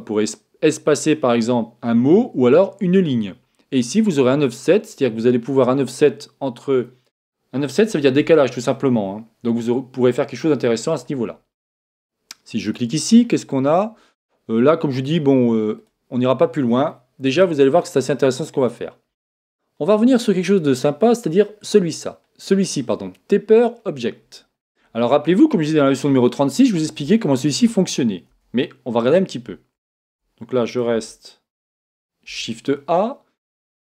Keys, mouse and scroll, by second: 4.3 click, 12.6 click, 13.1-15.7 middle drag, 15.8 click, 18.1-20.1 scroll up 1, 20.1-23.9 scroll up 1, 23.9-24.5 scroll down 1, 24.5-25.1 scroll down 1, 25.1-28.9 middle drag, 28.4 a, 30.0 Tab, 30.9 Tab, 32.2 shift+a.